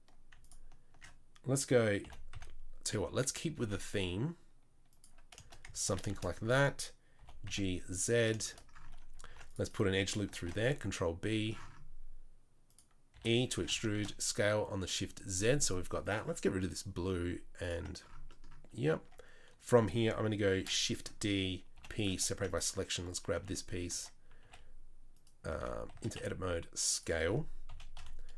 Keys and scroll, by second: 2.0 g, 3.6 ctrl+r, 7.2 g, 9.2 ctrl+r, 10.4 ctrl+b, 13.1 e, 13.6 s, 18.7 Tab, 18.9 Tab, 20.5 shift+d, 21.7 p, 22.3 Tab, 22.9 Tab, 23.3 s, 23.9 Tab, 24.4 s, 25.5 Tab, 25.9 a, 26.1 s, 27.7 KP_3, 27.9 KP_1.